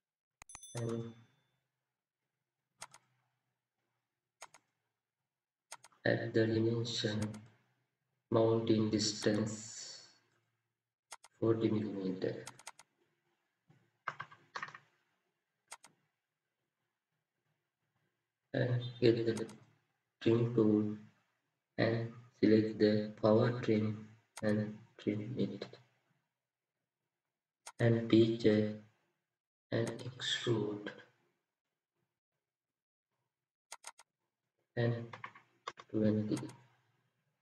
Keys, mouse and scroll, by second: 12.6 double click, 21.3-23.3 scroll down 1, 23.4-25.4 scroll down 1, 25.5-26.0 scroll up 1, 31.5 middle click, 32.4 scroll up 1, 33.8 double click, 35.1 typing.